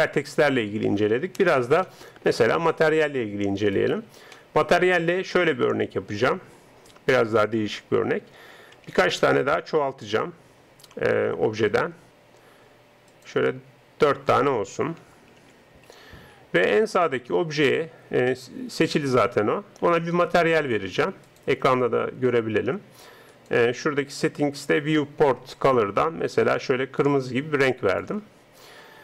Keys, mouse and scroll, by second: 1.8-3.7 middle drag, 3.7 right click, 4.4-8.8 middle drag, 5.5-8.8 drag, 9.0 shift+d, 15.4 shift+d, 20.4-25.2 drag, 25.5-29.0 drag.